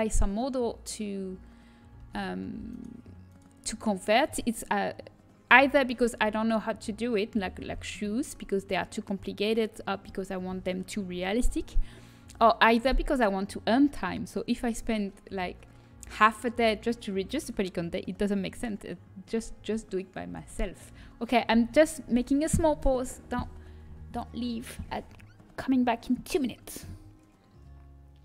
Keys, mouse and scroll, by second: 1.9 z, 2.8-6.6 right drag, 21.1 g.